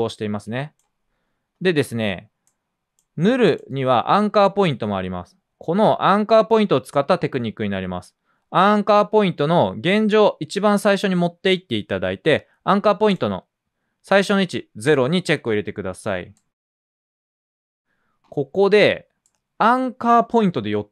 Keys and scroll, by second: 5.9 a, 9.7 typing.